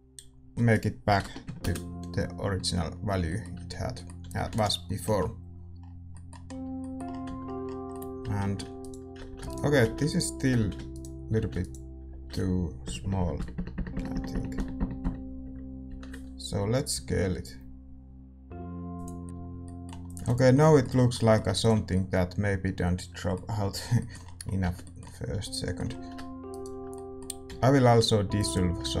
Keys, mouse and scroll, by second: 1.5-2.6 drag, 1.5 BackSpace, 2.6-4.2 middle drag, 3.5 Tab, 4.2 a, 5.0 ctrl+s, 7.2 Tab, 8.7-13.3 right drag, 9.2 a, 9.8 a, 10.5 a, 11.3 a, 12.8-13.3 ctrl+KP_Add, 15.8 ctrl+KP_Subtract, 16.9 s, 19.2-29.0 middle drag, 19.2 Tab, 19.2 click, 20.0-22.1 drag, 20.4 ctrl+s, 21.9 ctrl+s, 24.6 Tab, 25.2 a, 26.4-28.4 right drag, 28.4 x.